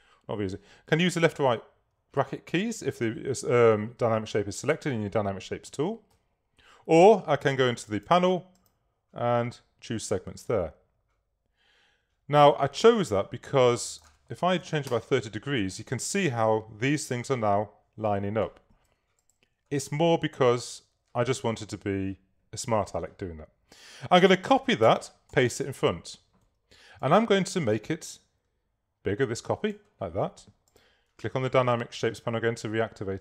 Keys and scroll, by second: 1.6 ], 5.7 [, 14.4-15.3 typing, 25.0 super+c, 25.4 super+f.